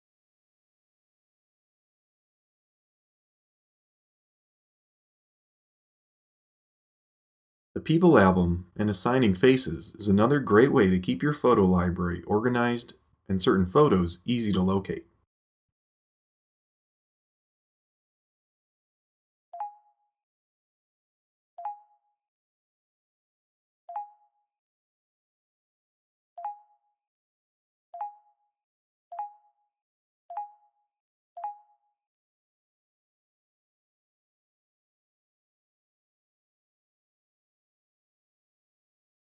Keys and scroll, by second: 0.0-0.3 typing.